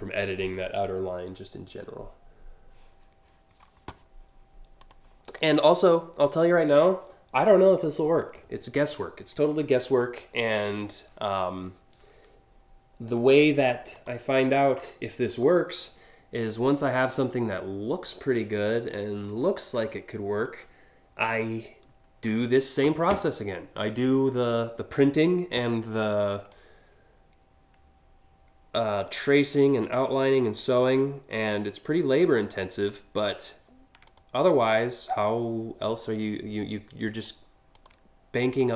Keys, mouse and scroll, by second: 4.5 click, 13.6 click, 14.1 click, 14.9 click, 16.0 click, 16.4-18.2 drag, 18.8-20.1 drag, 20.9 click, 26.3-28.8 drag, 29.5 click, 30.2 click, 30.9-32.5 drag, 33.7 click, 34.9-36.9 drag, 37.4 click, 38.3 scroll down 3.